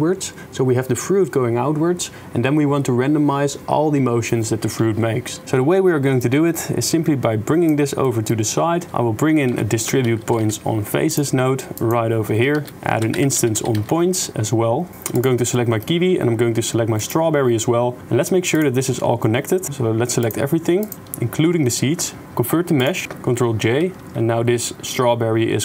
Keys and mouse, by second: 6.4-7.7 drag, 8.1 click, 8.9 shift+a, 12.5 shift+a, 15.5 middle click, 20.8 shift+click, 22.2 click, 22.4 click, 22.9 click, 23.5 ctrl+j, 24.0-25.1 middle drag, 25.4 middle click.